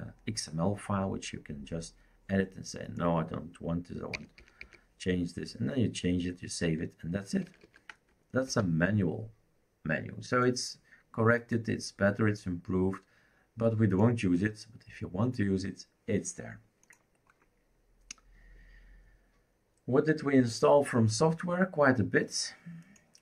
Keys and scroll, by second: 4.1 Delete, 4.4 Delete, 4.8 Delete, 7.4 ctrl+z, 7.6 ctrl+z, 8.5 ctrl+s.